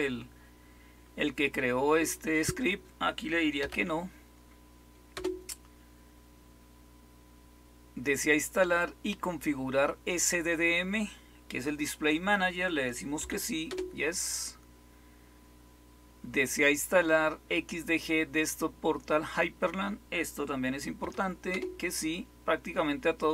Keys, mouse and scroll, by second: 3.5 n, 5.1 Return, 13.1 y, 13.6 Return, 20.9 y, 21.4 Return.